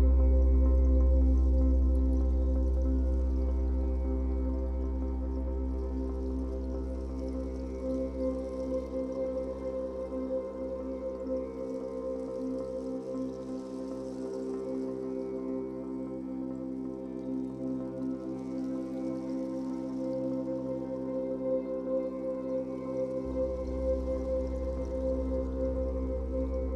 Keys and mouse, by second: 0.0-0.4 typing, 1.6 click, 2.7 typing, 3.7 ctrl+alt+click, 5.5-6.4 typing, 7.8 click, 8.8 click, 10.6 click, 11.8 typing, 13.4 click, 14.2-14.5 typing, 15.9 click, 16.3 alt+click, 17.4 typing, 18.1 click, 19.6 typing, 21.6-21.9 typing, 22.9 click, 24.0-26.7 drag.